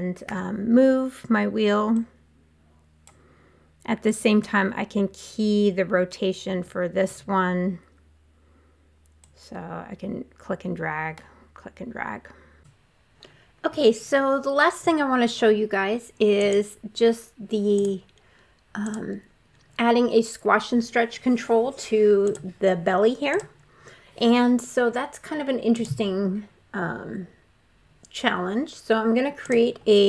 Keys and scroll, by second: 0.1 w, 6.4 w.